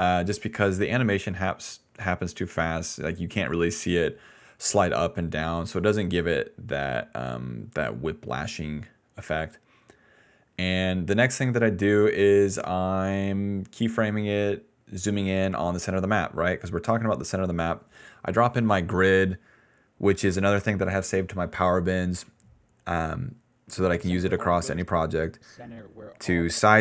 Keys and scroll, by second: 23.7 space, 24.7 space.